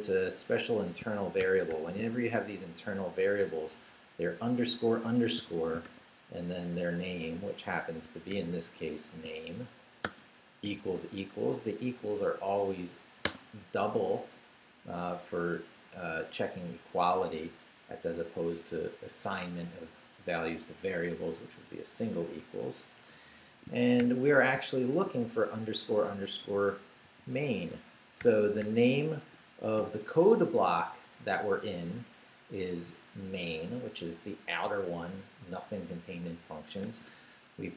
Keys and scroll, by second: 1.0 shift+BackSpace, 1.4 shift+-, 5.1-6.3 typing, 8.3 shift+-, 10.0 shift+space, 10.6 =, 13.2 space, 22.4 shift+', 24.0 shift+-, 25.9-28.2 typing, 29.8 shift+', 36.8 shift+;.